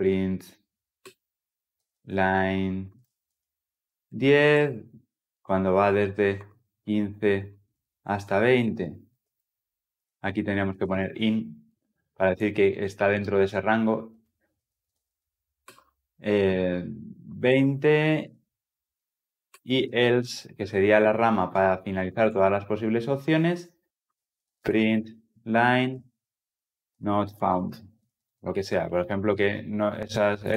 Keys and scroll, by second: 0.9 Return, 20.5 Return.